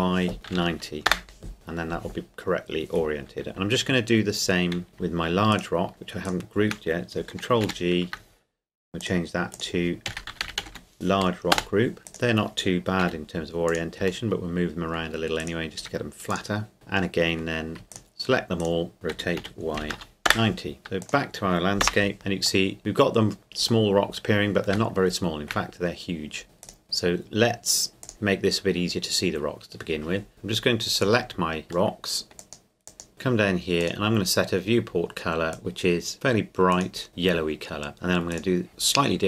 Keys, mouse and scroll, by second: 0.5 KP_0, 1.1 KP_Enter, 2.3-4.9 scroll down 1, 4.9 right click, 5.5 shift+right click, 7.6 ctrl+g, 9.0-10.0 drag, 10.0 shift+Left, 10.1-10.7 typing, 11.5 Return, 12.0 middle click, 12.1 right click, 13.0 r, 13.7 click, 14.3-15.4 middle drag, 15.4 right click, 15.8 r, 16.3 click, 16.8 middle click, 17.9 shift+right click, 19.1 r, 19.4 y, 19.8 KP_9, 20.3 KP_Enter, 21.0 click, 21.8 KP_0, 22.7 middle click, 23.1-23.9 scroll down 2, 23.9 middle click, 24.9 shift+middle click, 25.8 scroll down 2, 26.6 scroll down 1, 26.6 right click, 28.0-29.9 drag, 30.3-30.9 scroll down 2, 30.9-31.9 right drag, 31.9 middle click, 32.4 click, 38.3 right click.